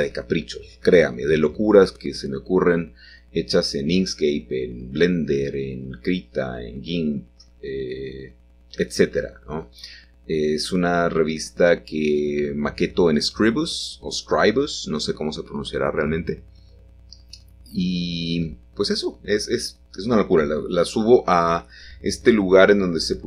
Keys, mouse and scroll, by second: 0.6 Escape, 1.3 g, 1.9 x, 4.5-6.2 drag, 6.2 middle click, 6.9 7, 9.9 g, 10.6 x, 15.1-16.1 shift+drag, 17.1 g, 17.3 y, 19.9-21.7 drag, 21.7 middle click, 22.5 g.